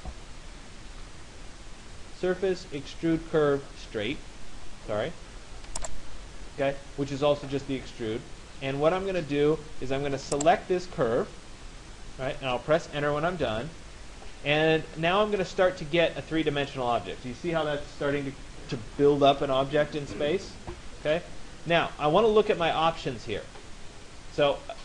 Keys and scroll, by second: 13.4 Return.